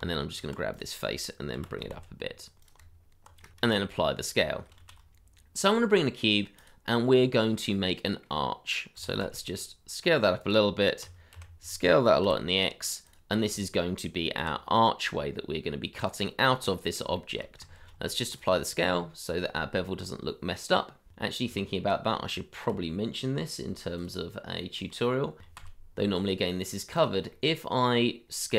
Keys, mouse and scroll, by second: 0.0 Tab, 1.5 g, 1.9 z, 2.7 Tab, 3.6 ctrl+a, 4.8 shift+a, 7.3 scroll down 1, 7.9 middle click, 8.9 s, 9.2 z, 11.0 s, 11.3 y, 12.2 x, 13.6 shift+middle click, 14.4 g, 16.4-17.2 scroll up 1, 17.2 shift+middle click, 17.7 ctrl+a, 18.7 scroll up 1, 21.4 ctrl+z, 22.7 n, 25.4 s, 25.5 z, 27.3 middle click.